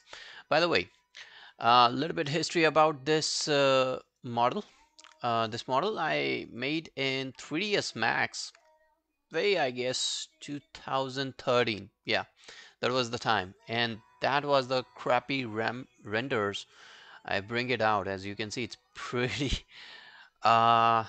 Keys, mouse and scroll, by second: 0.0 double click, 3.5 scroll down 1, 3.8 alt+middle click, 4.1 alt+right click, 4.3 alt+click, 4.7 alt+middle click, 6.0 alt+middle click, 6.2 alt+middle click, 6.4 alt+right click, 6.6 alt+click, 13.6 double click.